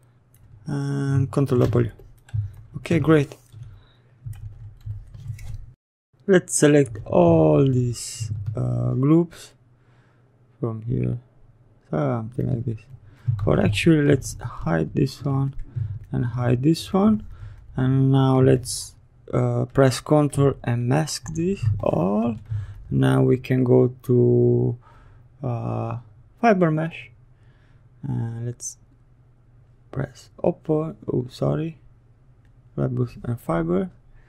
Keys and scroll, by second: 1.3 ctrl+w, 13.2 ctrl+z.